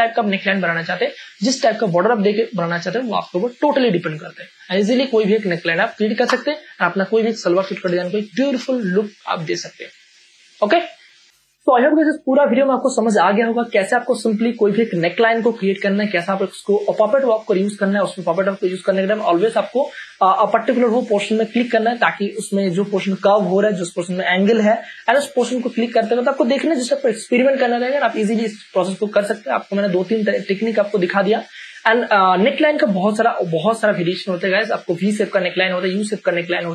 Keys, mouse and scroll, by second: 3.3 space, 3.6 ctrl+click, 5.1 click, 6.0 p, 6.2 Return, 7.0 Return, 7.9 space, 8.3 ctrl+click.